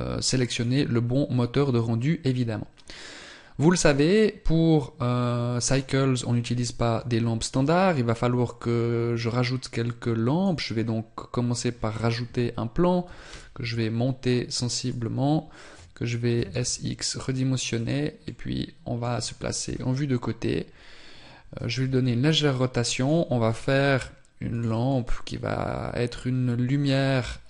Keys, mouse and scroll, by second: 7.4 shift+a, 18.1 middle click, 19.5 KP_3, 21.7 r, 24.7 middle click.